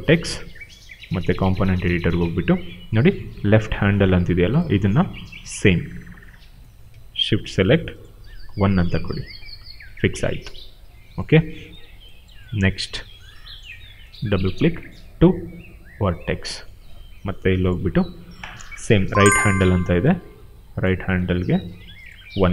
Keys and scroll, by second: 8.9 1, 9.1 Return.